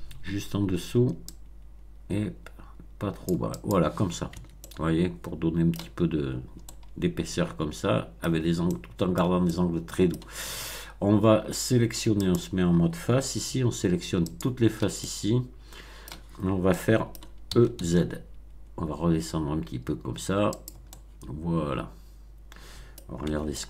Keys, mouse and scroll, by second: 1.2-3.4 drag, 3.5 click, 4.3 Tab, 4.6-5.9 middle drag, 6.6-8.4 middle drag, 8.2 Tab, 8.6 middle click, 9.4-10.3 shift+middle drag, 12.2 click, 14.2 alt+click, 14.9-16.2 alt+middle drag, 16.7 middle click, 17.4 e, 17.7 z, 20.5 click, 20.8-23.1 middle drag, 23.2 Tab, 23.5-23.6 middle drag.